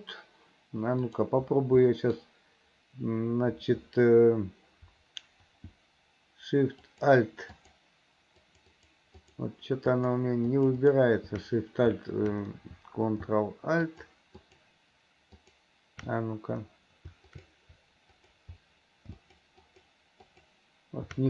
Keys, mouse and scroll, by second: 1.0 click, 1.9 middle click, 6.9 alt+shift+click, 7.6 alt+shift+click, 8.4 alt+shift+click, 8.8 alt+shift+click, 9.2 alt+shift+click, 9.9 alt+shift+click, 10.5 alt+shift+click, 10.8 alt+shift+click, 13.9 ctrl+alt+click, 14.4 ctrl+alt+click, 15.4 ctrl+alt+click, 17.4 click, 18.2 click, 19.3 alt+shift+click, 19.7 alt+shift+click, 20.3 alt+shift+click.